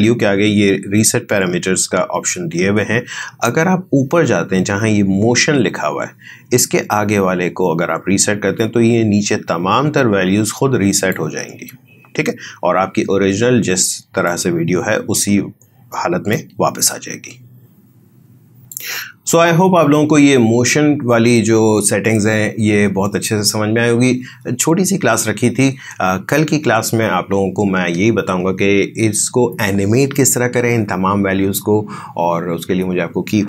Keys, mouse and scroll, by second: 10.9 click, 14.2-16.4 drag, 16.4 space.